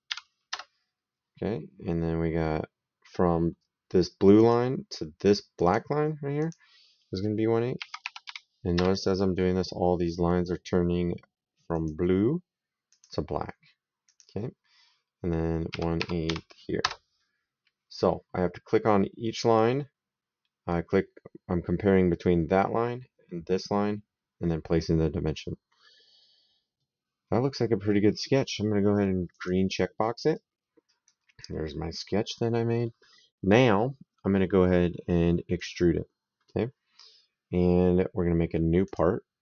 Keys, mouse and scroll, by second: 0.3 KP_Enter, 4.2 click, 5.4 click, 7.6 KP_1, 7.8 KP_Divide, 8.1 KP_8, 8.6 KP_Enter, 11.6 click, 12.7 click, 13.9 click, 15.5 KP_1, 15.8 KP_Divide, 16.1 KP_8, 16.7 KP_Enter, 29.2 click, 30.1 right click, 31.5 middle click, 35.4 click, 38.7 click.